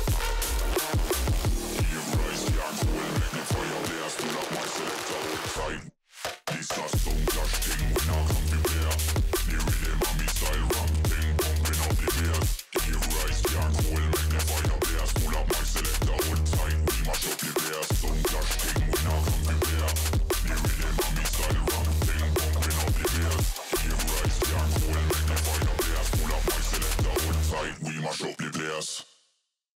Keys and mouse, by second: 0.0-0.4 typing, 1.5 z, 1.6 z, 1.7 z, 1.9 g, 3.1 ctrl+s, 4.1 drag, 4.9 click, 5.9-6.2 middle drag, 6.7 KP_1, 7.6 click, 8.0 s, 9.1 g, 10.6 r, 11.3 middle click, 12.3 r, 18.6 shift+middle click, 19.6 middle click, 20.4 click, 21.4 middle click, 22.6 middle click, 23.4 middle click, 23.8 middle click, 24.8 shift+a, 27.4-28.2 drag, 28.9-29.7 drag.